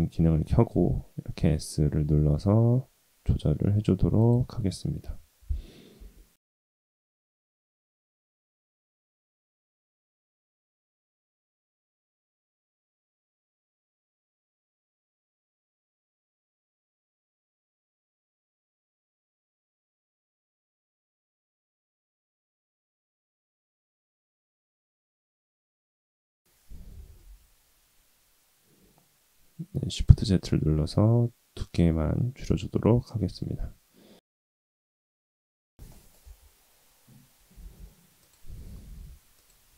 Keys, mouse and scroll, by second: 1.0 s, 5.0 KP_3, 5.9 s, 7.6-8.1 drag, 8.3 s, 11.9 Tab, 12.1 s, 12.8 Tab, 13.1 shift+middle click, 14.1 click, 14.4 s, 15.2 scroll up 1, 15.5 shift+middle click, 17.3 s, 18.1 click, 18.8 alt+z, 19.1 click, 20.1 click, 20.4 click, 21.1 s, 22.1 click, 22.2 click, 22.6 s, 25.2 shift+z, 25.9-26.9 scroll down 2, 26.2 Tab, 26.9 s, 30.4-33.4 middle drag, 35.2-35.6 shift+middle drag, 35.8 middle click, 36.2 Tab, 37.5 alt+z, 38.1 click, 38.9 3, 39.3 click.